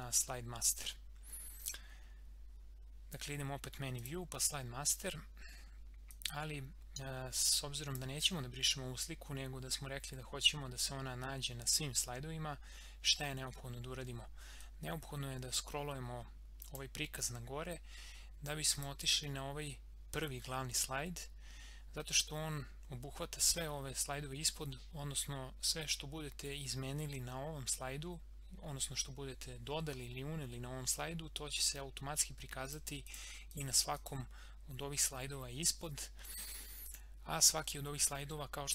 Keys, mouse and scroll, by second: 1.6 click, 4.1-10.1 drag, 14.6-18.7 drag, 23.6 scroll down 1, 24.4 scroll up 1, 32.6 click, 34.4 scroll down 1, 35.2 scroll up 1, 36.9 click, 38.5 scroll down 1.